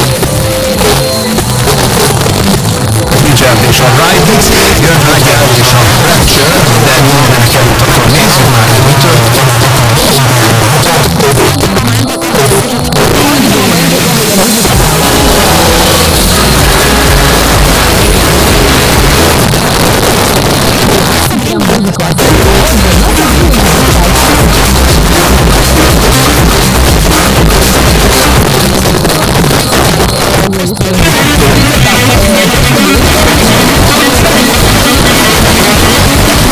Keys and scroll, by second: 9.2 Page_Down, 19.3 Page_Down, 28.4 Page_Down.